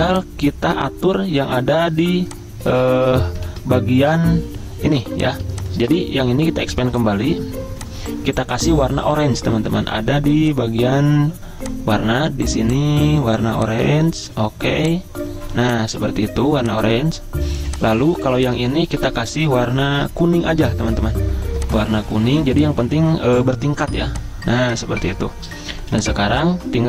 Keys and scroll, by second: 3.5 ctrl+z, 5.0 z, 5.9 v, 7.8-8.5 typing, 25.8 z.